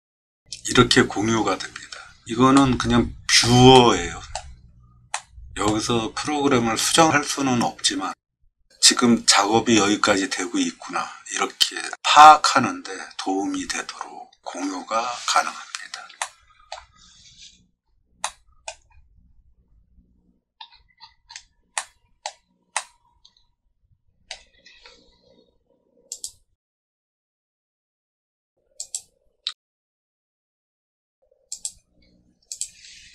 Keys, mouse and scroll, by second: 2.5 middle click, 3.7 middle click, 5.1 middle click, 8.2 middle click, 8.5 middle click, 14.5 middle click, 14.6 middle click, 16.2 shift+middle click, 17.1 middle click, 17.2 middle click, 17.8 middle click, 18.2 middle click, 18.9 scroll up 1, 19.0 middle click, 19.3 middle click, 19.7 middle click, 20.6 middle click, 20.7 middle click, 20.9-21.4 scroll down 4, 21.3 middle click, 21.7 middle click, 22.7-24.3 middle drag, 26.1 click, 28.8 click, 31.5 click, 32.5 click.